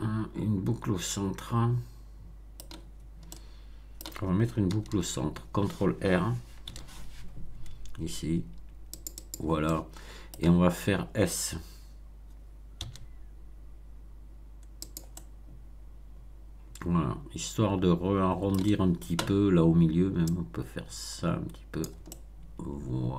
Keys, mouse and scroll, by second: 3.2 middle click, 4.7 a, 6.6 ctrl+r, 8.9 click, 9.6 middle click, 12.7 s, 14.8-18.6 drag, 15.1-18.6 middle drag, 20.3-22.0 drag, 22.0-23.1 middle drag.